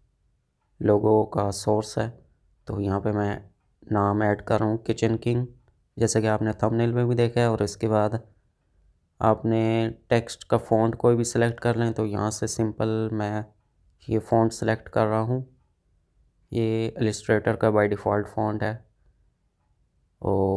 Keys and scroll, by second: 11.3 h.